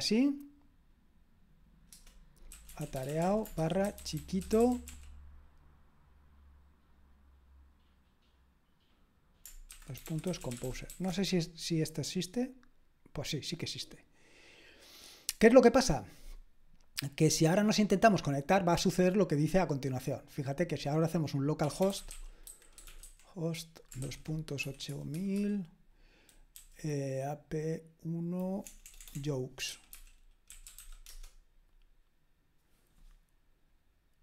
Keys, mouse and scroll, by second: 1.9 Return, 2.3-5.3 typing, 9.7-11.4 typing, 21.8-25.3 typing, 28.6-31.2 typing.